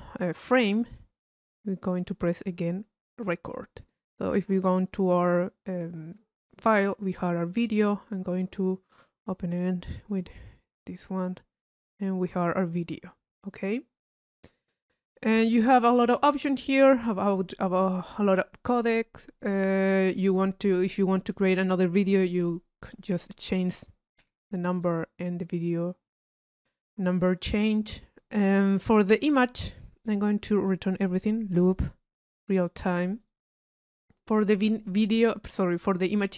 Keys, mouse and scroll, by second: 31.5 click, 32.5-33.5 drag, 34.2 click.